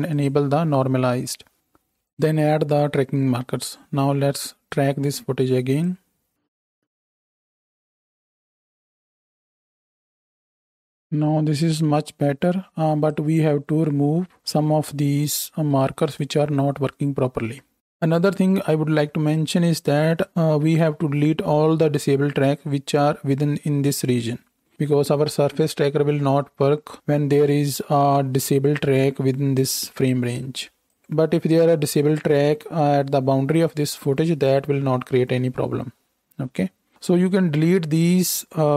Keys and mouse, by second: 0.1 click, 0.2-1.5 middle drag, 1.5 ctrl+z, 1.5-38.7 drag.